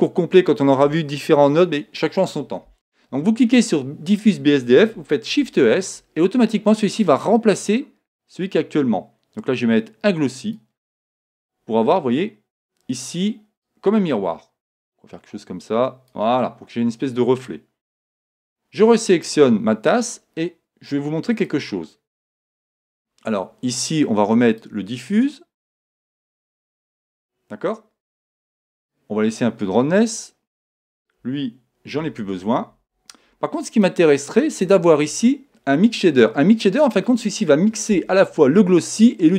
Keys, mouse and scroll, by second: 3.4-5.4 drag, 5.4 shift+s, 13.6-15.3 drag, 19.2-21.1 right drag, 21.5-23.2 drag, 24.6-26.5 drag, 28.9-30.8 drag, 30.9-32.6 drag, 32.0 x, 34.3-35.6 drag, 36.2-37.9 drag.